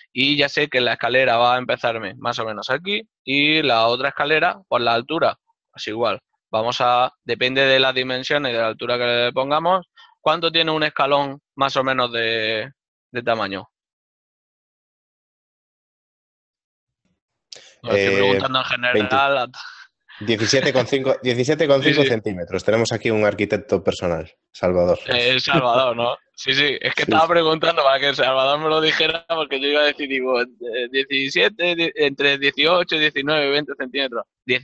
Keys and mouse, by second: 2.4 right click, 15.5 click, 25.3 shift+click.